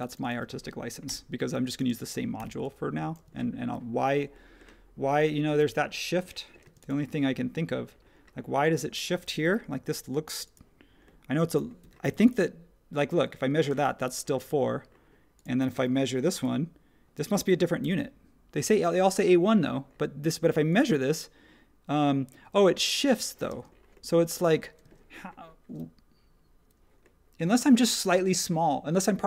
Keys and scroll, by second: 1.0 p, 1.7 space, 2.3 p, 3.2 space, 6.6 space, 9.4 t, 11.8 Escape, 13.7 space, 16.4 i, 17.1 space, 23.5 space, 24.8 space.